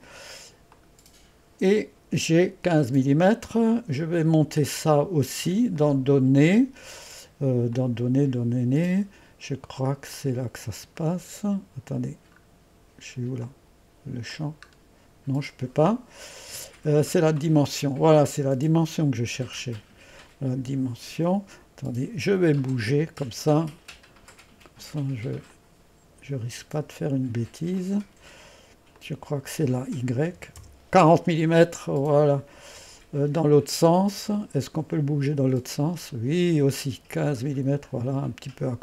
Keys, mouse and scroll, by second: 0.8 click, 1.3 click, 5.8 click, 7.8-8.4 drag, 8.6 click, 9.2 click, 10.2 click, 11.0 scroll down 2, 13.5 click, 14.4 click, 15.2 scroll up 2, 17.3 click, 22.6-24.8 drag, 25.5-27.6 drag, 27.8 click, 29.0 click, 35.0 click, 35.7-38.3 scroll up 1, 38.3-38.8 scroll down 1.